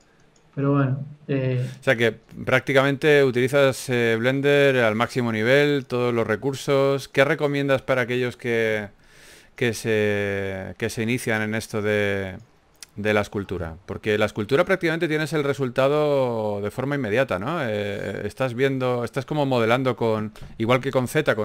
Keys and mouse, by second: 1.8 KP_1, 2.7 f, 3.7 f, 6.9 i, 9.1 KP_3, 9.8 g, 10.0 f, 10.2 f, 14.6 KP_1, 17.9 shift+d, 19.1 KP_3, 20.5 s.